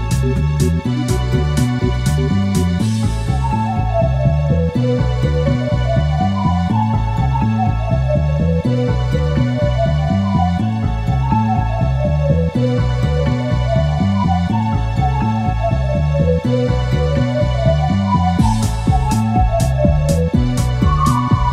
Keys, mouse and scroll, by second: 0.5 shift+click, 1.8 shift+scroll up 2, 2.4 shift+click, 3.2 click, 3.7-4.4 scroll down 2, 4.8 middle click, 7.8-8.4 scroll down 2, 9.0 click, 10.1 click, 11.4-11.7 scroll up 2, 12.1 scroll up 2, 15.2 click, 16.3 click, 17.5 F12.